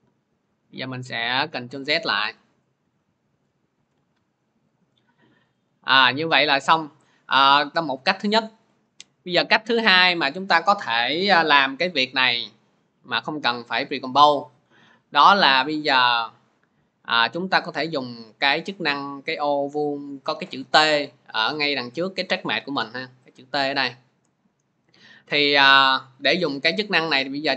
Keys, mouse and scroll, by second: 0.3 ctrl+z, 1.0 ctrl+z, 1.5 ctrl+z, 2.6 ctrl+z, 3.1 ctrl+z, 4.7 click, 5.5 click, 8.6 click, 9.2 click, 15.1 click, 16.1-20.1 drag.